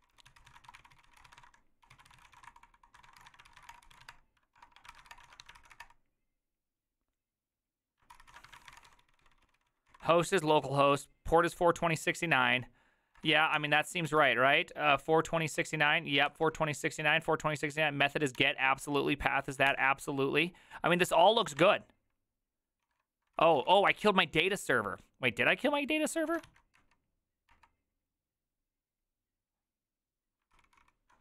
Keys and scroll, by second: 0.0-6.2 typing, 7.9-11.3 typing, 13.1 typing, 13.5 ctrl+t, 14.0 ctrl+h, 15.3-16.1 typing, 16.2 ctrl+n, 17.6 j, 18.3 ctrl+h, 19.7 ctrl+n, 21.4 ctrl+a, 21.6 ctrl+a, 22.8 ctrl+a, 23.4 ctrl+c, 23.5 ctrl+c, 23.7 ctrl+c, 24.4 Return, 26.3 ctrl+a, 26.5 ctrl+a, 27.5 Return, 30.5 ctrl+c, 30.8 ctrl+c.